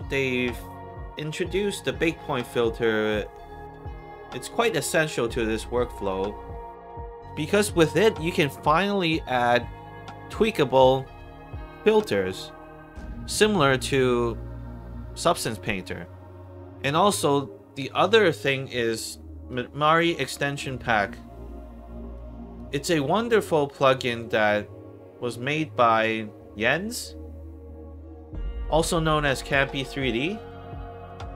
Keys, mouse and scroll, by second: 6.5-7.5 alt+drag, 7.9 alt+middle click, 19.4 alt+click, 20.2 alt+middle click, 22.1 alt+click, 23.0 alt+middle click, 23.7 alt+right click, 26.5 click, 27.6-28.9 scroll up 3, 30.3 click.